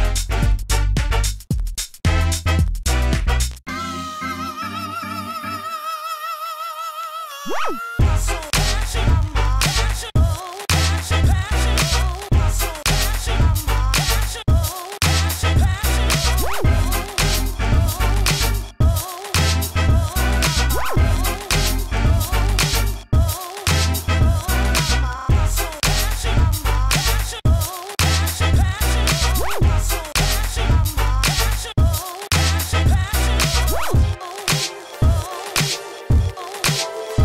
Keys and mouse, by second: 0.1 s, 0.2 f, 1.7 s, 1.8 f, 1.9 click, 4.7 drag, 7.9 s, 8.1 f, 8.9 f, 9.6 f, 12.8 ctrl+z, 13.2 ctrl+z, 13.4 f, 13.9 f, 14.7 s, 14.9 f, 15.7-16.3 drag, 16.3 ctrl+z, 16.4 ctrl+z, 16.8 ctrl+z, 16.9 shift+f, 17.7-18.9 drag, 18.9 s, 19.3-20.7 drag, 19.9 f, 21.5 f, 24.5-24.9 middle drag, 24.5 s, 25.7-26.1 drag, 27.2 middle drag, 27.4-27.7 drag, 27.7-28.0 middle drag, 28.0 click, 28.2 s, 28.5 middle click, 28.7-29.3 drag, 29.3 ctrl+z, 29.4 ctrl+z, 29.7 shift+f, 32.8 click, 33.1 drag, 33.4 middle drag, 33.7 click, 35.1 drag, 35.4-36.4 drag, 36.8-37.2 drag.